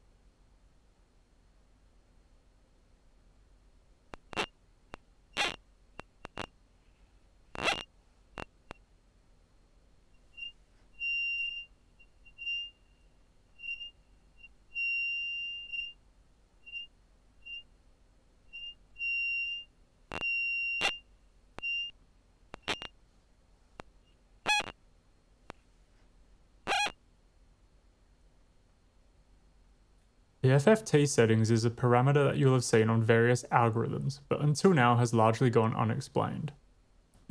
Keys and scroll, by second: 1.3 typing, 3.7 w, 3.9 space, 8.8 space, 9.7 w, 9.9 space, 27.2 space.